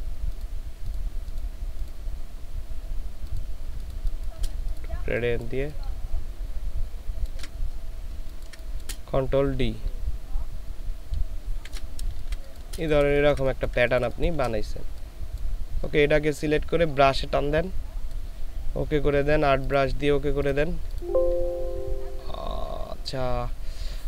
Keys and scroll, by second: 3.8 space, 8.1 ctrl+space, 9.1 ctrl+space, 9.6 ctrl+d, 12.1 ctrl+space, 13.2 ctrl+space, 13.6 typing.